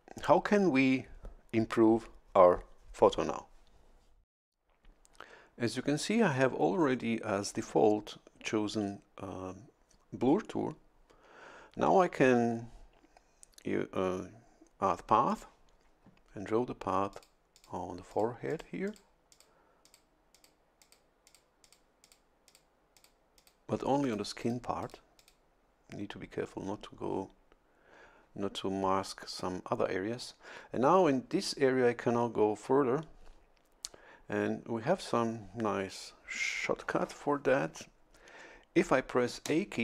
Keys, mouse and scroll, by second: 15.3 click, 17.1 click, 17.6 click, 18.1 click, 18.5 click, 19.3 click, 19.8 click, 20.3 click, 20.8 click, 21.3 click, 21.6 click, 22.0 click, 22.5 click, 23.0 click, 23.4 click, 24.0 click, 24.4 click, 24.8 click, 25.2 click, 39.5 a.